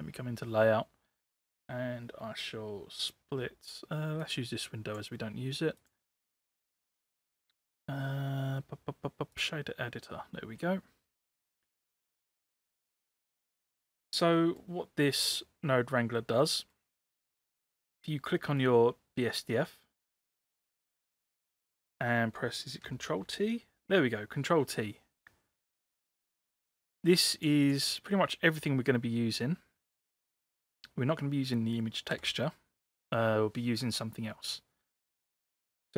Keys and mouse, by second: 4.2 click, 6.3-9.4 drag, 11.5 middle click, 12.6-13.7 drag, 14.4 middle click, 16.3 middle click, 17.5 click, 23.2 ctrl+t, 26.7 click, 30.6-30.9 drag, 32.2 Delete.